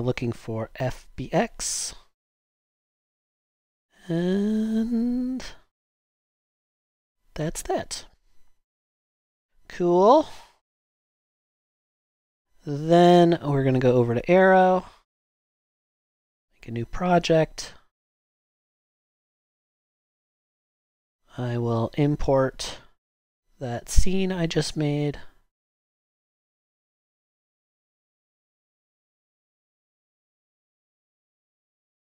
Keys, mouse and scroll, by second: 19.2-20.4 typing.